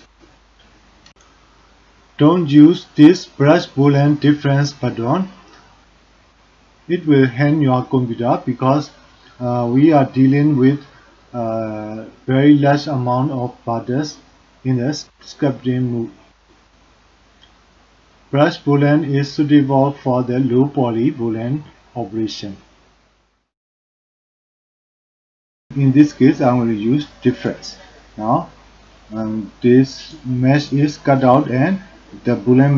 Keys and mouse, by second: 1.3 middle click, 27.3 click, 30.0 click, 30.5 click, 31.2-31.5 middle drag, 31.5 click, 31.5 right click, 32.1 middle click.